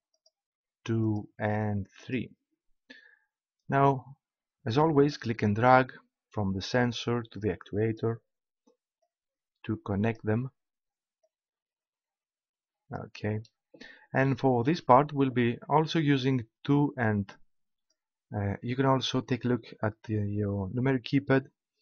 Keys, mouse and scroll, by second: 0.0 click, 1.0-3.4 drag, 5.0-7.4 drag, 9.0-10.7 drag.